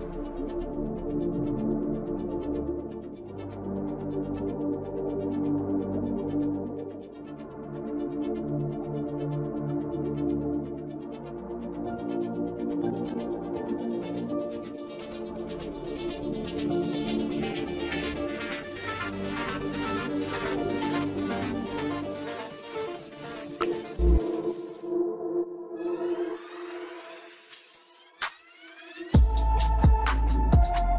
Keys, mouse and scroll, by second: 0.4-0.9 scroll down 15, 0.9 shift+middle click, 1.4 scroll up 3, 1.7 shift+middle click, 2.1 scroll down 2, 2.6 shift+middle click, 2.9 scroll up 1, 3.1 shift+middle click, 3.9 alt+shift+click, 4.1-5.5 alt+shift+click, 5.7 scroll down 1, 5.9 shift+middle click, 6.2 scroll up 1, 6.4 middle click, 7.0 scroll up 1, 7.2 scroll down 1, 7.8 alt+shift+click, 8.1 alt+shift+click, 8.6 scroll down 2, 8.8 shift+middle click, 9.2-9.7 scroll up 1, 9.9 alt+shift+click, 10.4 scroll down 1, 10.6 middle click, 10.8-12.0 scroll up 9, 12.0-15.8 middle drag, 15.8-19.8 drag, 19.8 Tab, 20.5 scroll down 3, 20.7-21.3 middle drag, 21.3-21.6 scroll up 3, 21.6 shift+middle click, 22.3 click, 23.0 click, 24.2-25.9 drag, 26.6 click, 29.6 click, 29.9 click, 30.0 scroll down 3, 30.3 middle click, 30.6 scroll up 4.